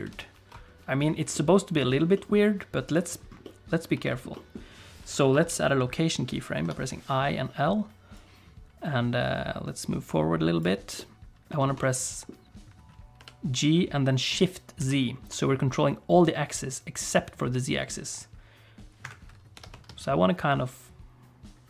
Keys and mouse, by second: 0.0 ctrl+space, 1.3 middle click, 1.9 middle click, 2.1 middle click, 2.9 click, 3.4 middle click, 4.0 shift+middle click, 4.3 middle click, 5.3 i, 8.1-10.6 drag, 10.9 middle click, 11.6 shift+middle click, 11.8 middle click, 13.2 g, 19.5 g.